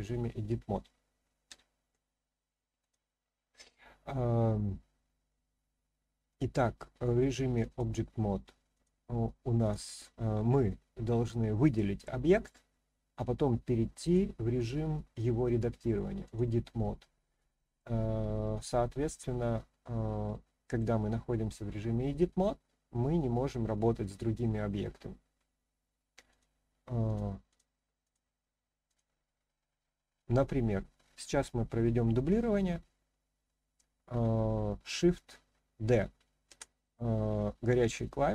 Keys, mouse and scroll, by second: 2.8 click, 6.3-7.8 drag, 8.7 click, 9.6 click, 14.0-16.3 drag, 17.7-20.8 middle drag, 26.3-27.1 drag, 27.5 click, 28.0 click, 28.9 click, 36.4 shift+d.